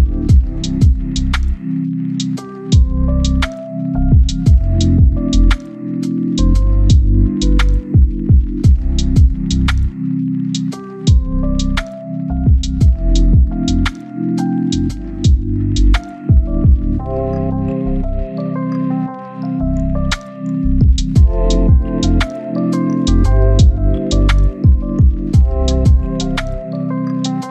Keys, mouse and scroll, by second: 0.3 scroll down 1, 0.4 right click, 0.8-1.1 scroll up 1, 1.1 scroll down 1, 1.2 scroll up 1, 1.5-2.8 right drag, 2.8 scroll up 1, 3.0 click, 3.1 right click, 3.4 click, 3.5 scroll down 1, 3.7 scroll up 1, 3.8 click, 6.8 scroll down 1, 6.9 right click, 7.2 scroll up 1, 7.5 click, 7.6-9.2 right drag, 9.2 scroll down 1, 9.4-10.1 scroll up 1, 10.1 scroll down 1, 10.3-12.1 right drag, 12.1 scroll up 1, 12.2 right click, 12.4 click, 13.5-14.0 scroll up 1, 14.0 click, 14.6 right click, 15.2 click, 15.4 right click, 15.7 click, 16.3 right click, 16.5 click, 16.6 right click, 17.2 click, 17.7 right click, 18.1 click, 19.6 right click, 20.8 click, 21.5 right click, 22.3 click, 23.1 right click, 24.1 scroll down 1, 24.2 right click, 26.3-26.9 scroll up 1, 26.9 scroll down 1, 27.1-27.5 scroll up 1.